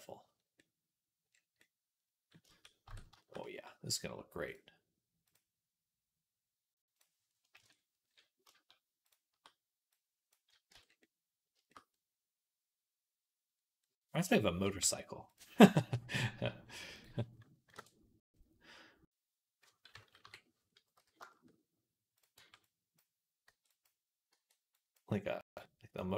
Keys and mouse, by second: 0.4-2.7 drag, 0.4-2.7 middle drag, 0.4-2.7 right drag, 2.7 Tab, 5.2-6.8 right drag, 8.9 shift+right click, 10.6 Tab, 11.4-13.3 shift+drag, 14.6 Tab, 20.1 KP_3, 20.8 z, 22.2 b, 22.5 click, 23.3 b, 24.2 b, 25.3 b.